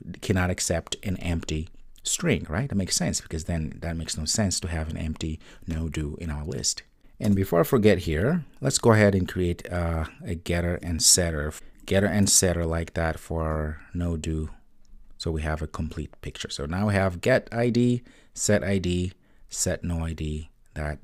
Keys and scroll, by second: 6.9 super+s, 9.2 super+n.